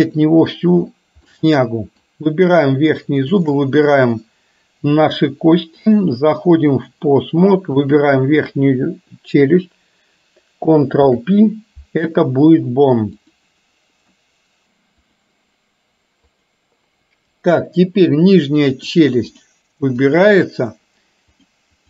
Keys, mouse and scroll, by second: 1.3 middle click, 3.3 shift+click, 5.8-7.0 drag, 7.9 click, 11.2 ctrl+p, 14.3 middle click, 14.7 click, 16.4 click, 17.7-19.0 middle drag, 19.4 click, 20.0 click, 21.4 click.